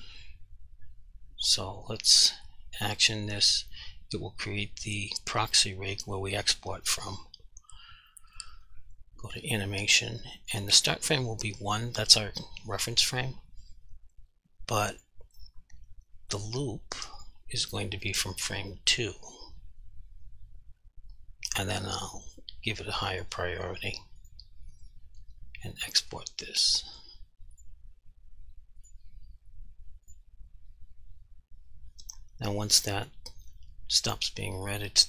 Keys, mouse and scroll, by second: 2.3 click, 6.9 click, 15.0 click, 23.2 click, 25.9 click.